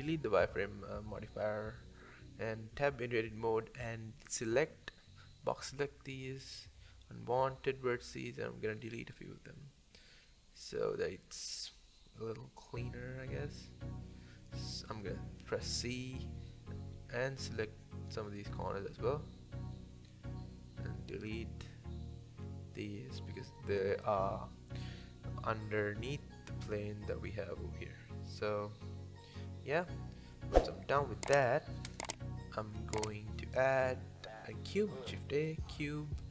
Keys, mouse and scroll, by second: 0.2 Tab, 0.3 click, 0.6 scroll down 4, 0.9-1.6 scroll up 3, 1.6 Tab, 2.4 click, 4.0 x, 4.9 click, 5.9 x, 7.5 click, 8.2 x, 8.9 click, 9.6 x, 11.1 click, 12.0 x, 12.8 click, 13.4 c, 22.6 c, 25.6 x, 26.2 Tab, 26.6-27.2 middle drag, 27.2 alt+z, 27.5 alt+z, 27.7 click, 28.0-28.7 middle drag, 28.7-29.1 scroll up 5, 29.1 scroll down 5, 29.4-30.0 middle drag, 30.0 click, 31.1 KP_7, 31.7 click, 31.9 middle click, 32.4 KP_7, 32.7 shift+a, 34.3 scroll up 1, 34.6-35.0 shift+middle drag, 35.0-35.4 scroll up 2, 35.4-36.3 scroll down 2.